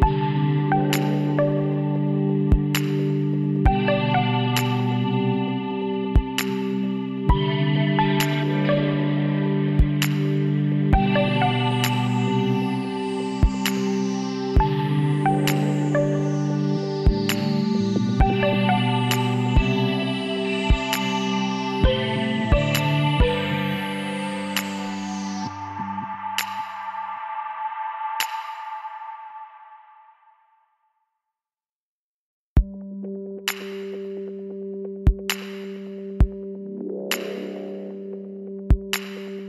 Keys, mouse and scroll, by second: 2.4 click, 3.1-4.1 middle drag, 3.7 Tab, 4.1 click, 6.0-10.9 middle drag, 11.8 KP_7, 14.4 middle click, 15.0-19.5 middle drag, 19.8-21.4 drag, 21.0 z, 22.5 z, 23.9 KP_1, 24.0 middle click, 25.4 z, 26.0 middle click, 26.3 middle click, 27.7-29.6 middle drag, 29.6 b, 32.4 ctrl+z, 33.1-34.8 drag, 34.9 b, 37.6 h, 38.1 click.